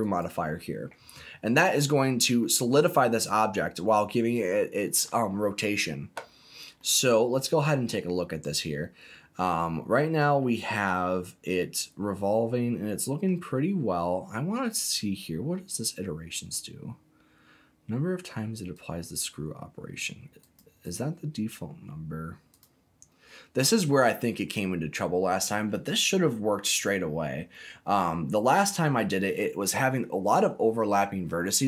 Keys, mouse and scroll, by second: 1.5 middle click, 2.7-3.2 scroll up 2, 3.6 middle click, 6.4 scroll down 1, 6.7-13.2 middle drag, 18.7-20.0 drag, 20.4 click, 20.8-22.6 right drag, 27.5-29.0 middle drag.